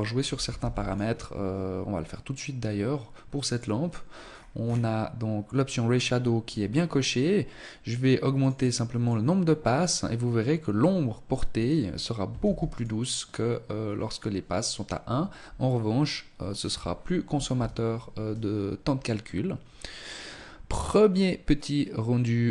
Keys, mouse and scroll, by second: 0.8 scroll down 2, 2.4 click, 3.2-3.8 scroll down 5, 5.4 scroll up 2, 7.3 click, 7.5 click, 7.7 click, 8.0 click, 11.4 ctrl+s, 13.6-14.5 scroll up 1.